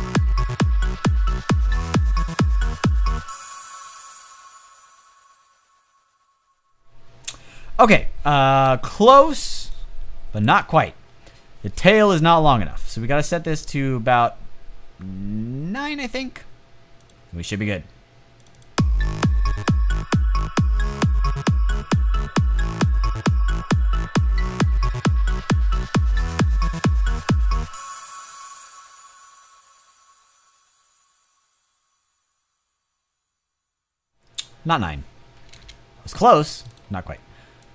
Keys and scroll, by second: 8.6 space, 35.4 space.